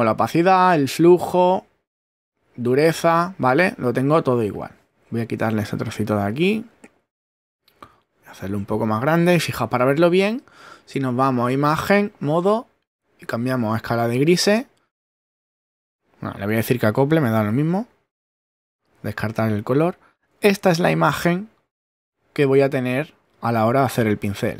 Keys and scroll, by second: 4.9 shift+<.